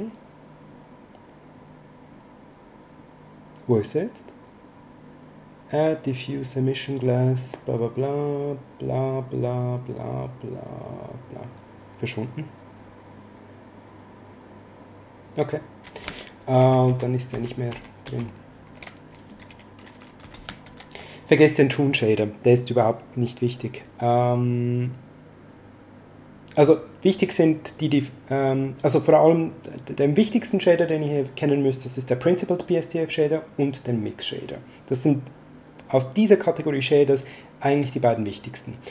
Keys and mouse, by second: 16.5 ctrl+z, 19.2 click, 20.2 x, 20.7 shift+a.